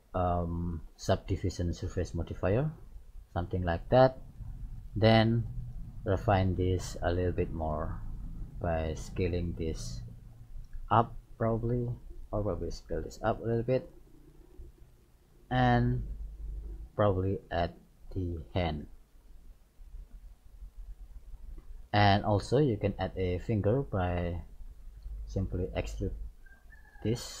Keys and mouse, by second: 3.0-4.9 middle drag, 4.9 right click, 6.7 middle click, 7.5 ctrl+a, 10.0-11.7 middle drag, 11.9 right click, 12.9 ctrl+a, 14.4-16.2 middle drag, 15.9 KP_3, 18.9 e, 21.1-24.0 middle drag, 23.4 e.